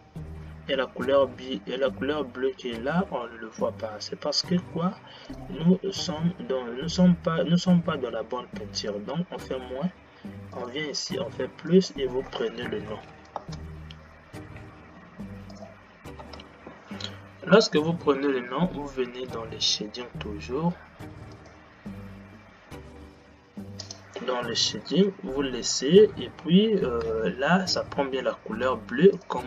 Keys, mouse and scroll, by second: 5.4-6.1 drag, 6.1-8.9 scroll down 9, 8.9-14.9 drag, 16.4 space.